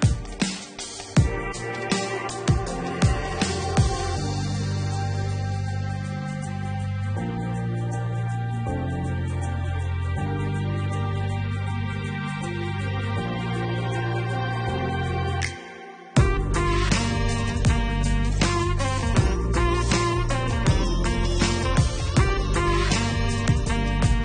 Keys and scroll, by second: 14.8 -.